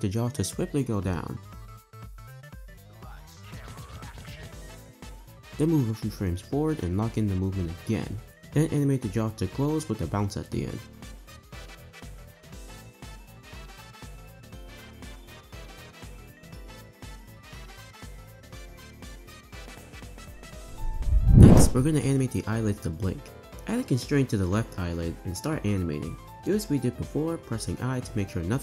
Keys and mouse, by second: 0.6 click, 1.0 space, 1.2 space, 2.2 r, 4.7 space, 4.8 space, 5.9 o, 6.9 i, 8.7 space, 8.8 space, 9.7 r, 12.7 Right, 13.0 Right, 14.2 r, 15.4 click, 15.7 shift+d, 18.1 space, 21.0 space, 21.5 space, 23.5-26.0 drag, 26.3 space, 26.3 space, 26.5 space, 27.9 i.